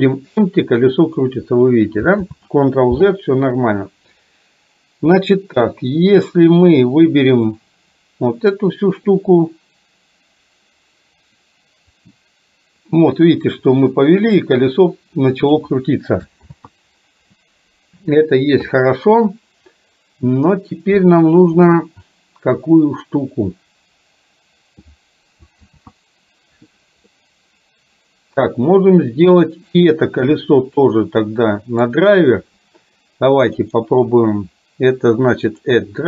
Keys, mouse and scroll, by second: 2.3 ctrl+z, 3.8 ctrl+z, 5.0 ctrl+z, 6.8 click, 12.1-15.6 drag, 16.6 ctrl+z, 25.6 ctrl+z, 27.1-28.5 middle drag, 29.8 click, 30.9-31.9 middle drag, 33.8-36.0 right drag.